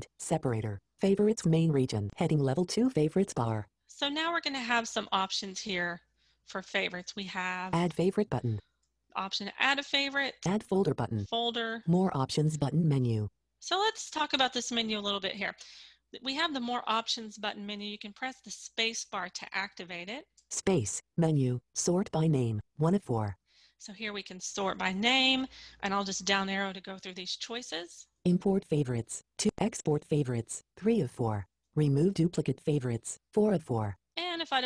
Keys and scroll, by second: 17.9 space, 21.0 space.